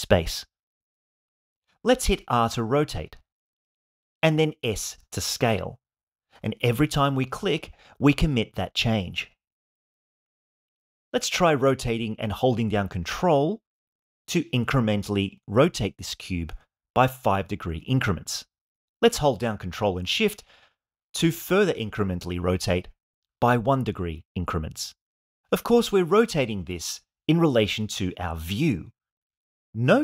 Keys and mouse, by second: 2.0 r, 3.6 click, 4.5 s, 8.9-10.6 middle drag, 11.9 r, 23.8 ctrl+shift+click.